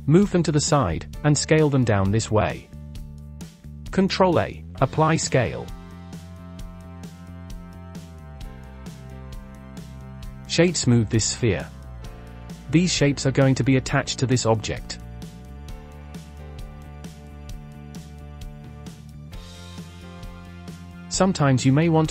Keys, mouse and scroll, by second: 0.3 click, 1.1 scroll down 2, 1.3 shift+middle click, 1.5 scroll up 4, 2.0 s, 4.1 ctrl+a, 5.4 click, 5.6-6.1 scroll up 1, 6.1 click, 6.4 click, 7.0 click, 7.4 click, 8.2 drag, 8.4 scroll down 2, 8.7-9.2 middle drag, 9.2 drag, 9.4-10.0 scroll up 1, 10.0 click, 10.5-11.5 right drag, 11.5 click, 11.7-12.3 scroll down 2, 12.3-12.8 scroll down 2, 12.8-15.4 shift+middle drag, 15.9-16.2 scroll up 2, 16.2-16.5 shift+middle drag, 16.5 click, 16.8-17.6 scroll down 3, 17.6 middle click, 18.5 scroll down 2, 18.7 click, 19.5 scroll down 1, 19.7 shift+middle click, 20.5-22.1 drag.